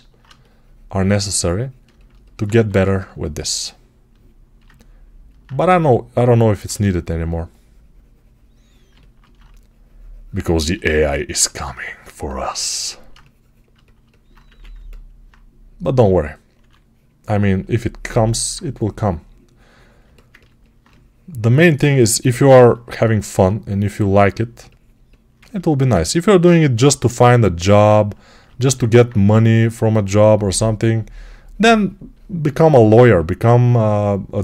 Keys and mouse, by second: 2.4 1, 8.8-24.4 alt+shift+right drag, 14.3 1, 15.9 2, 16.4 3, 22.1 g, 24.4-34.4 alt+drag, 26.0 3.